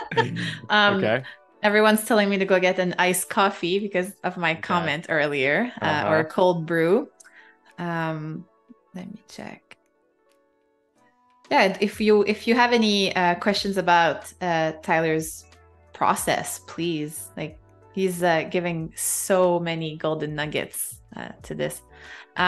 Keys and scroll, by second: 1.7 super+z, 4.3 super+-, 4.4 space, 11.1 a, 12.3 space, 18.7 super+[.